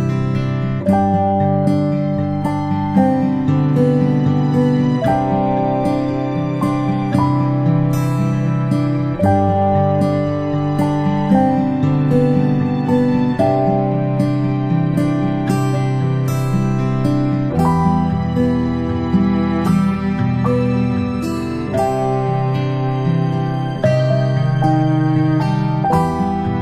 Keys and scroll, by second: 13.9 ctrl+space, 14.2 ctrl+space, 15.9 space, 16.1 space, 16.2 space, 17.7 space, 17.9-21.2 space.